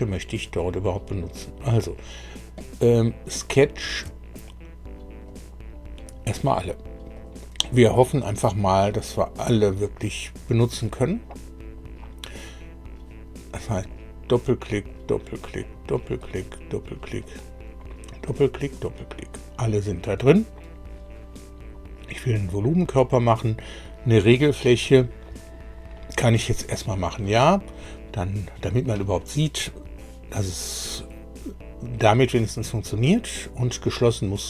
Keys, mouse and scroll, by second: 0.6 click, 4.3 ctrl+click, 5.2 ctrl+click, 6.0 ctrl+click, 6.5 ctrl+click, 7.1 ctrl+click, 13.7 click, 14.6 click, 15.4 click, 16.2 click, 17.0 click, 18.2 click, 22.2 click, 27.8 click.